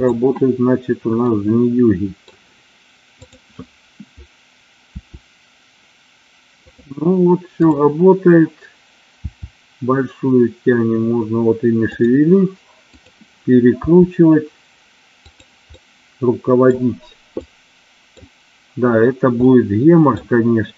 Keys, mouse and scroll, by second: 1.2 middle click, 3.2-4.3 drag, 4.8 r, 7.6-8.7 drag, 9.1 r, 12.0 click, 13.0 click, 13.8 r, 15.2 click, 15.7 middle click, 17.5 middle click, 19.4 middle click.